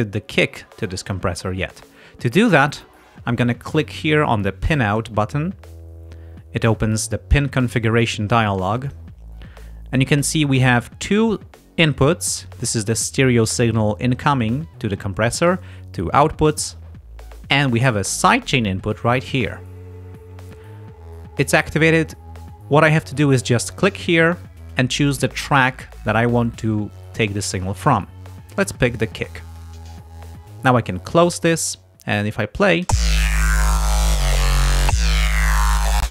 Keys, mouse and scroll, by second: 4.9 click, 7.6-9.2 drag, 23.7 click, 29.6 click, 31.5 click, 32.9 space, 36.0 space.